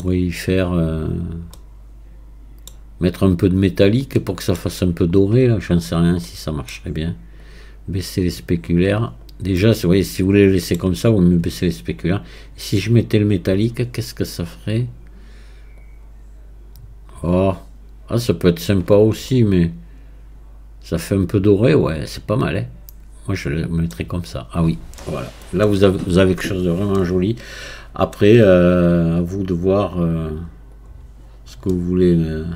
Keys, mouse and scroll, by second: 1.1-1.6 scroll up 1, 1.6-5.8 middle drag, 5.8-6.2 scroll up 1, 6.2-7.4 middle drag, 7.4-9.0 drag, 9.0-9.6 scroll down 4, 9.6-12.4 middle drag, 12.4-19.2 drag, 19.2 scroll up 1, 19.3-22.3 middle drag, 24.0-25.0 scroll down 2, 25.0 middle click, 25.9 click, 26.5-27.0 scroll down 2, 27.0-29.2 middle drag, 29.2-31.2 right drag, 31.2 scroll down 4, 31.7-32.5 middle drag.